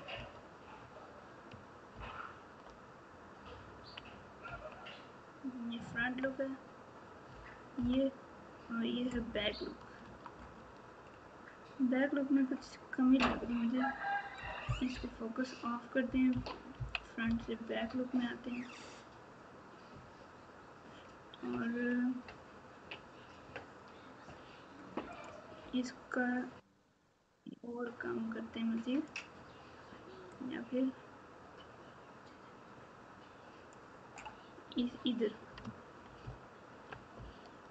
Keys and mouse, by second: 0.1 KP_3, 1.9 ctrl+KP_8, 4.4 KP_1, 5.9 KP_9, 6.1 KP_9, 10.0 Tab, 14.9 KP_Divide, 16.3 KP_3, 16.7 KP_1, 27.2-29.1 drag, 30.3-33.8 drag, 36.2 ctrl+KP_4, 36.7 ctrl+KP_4, 37.1 ctrl+KP_8, 37.6 ctrl+KP_8.